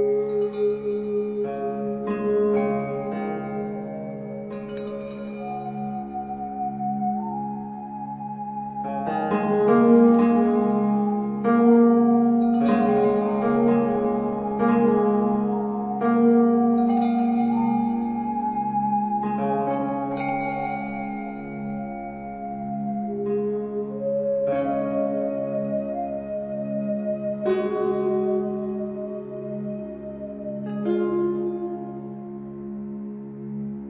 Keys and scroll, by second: 14.0 ctrl+a.